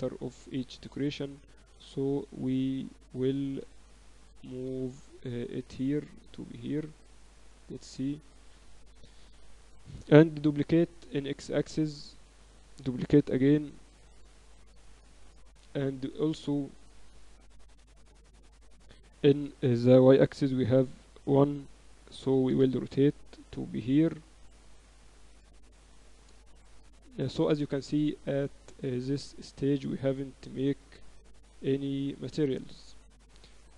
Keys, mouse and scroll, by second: 1.1-2.9 drag, 3.1 middle click, 5.7-7.4 drag, 8.1-10.3 middle drag, 10.3 shift+d, 11.3 middle click, 12.2-14.4 middle drag, 13.2 shift+d, 16.3-18.2 middle drag, 16.7 KP_7, 18.4-21.5 middle drag, 20.0 shift+d, 21.3 r, 23.0 click, 23.8-25.0 middle drag, 25.0-25.7 scroll up 1, 25.7-26.8 middle drag, 27.3-30.8 drag, 30.8-31.9 middle drag, 31.9-33.7 drag.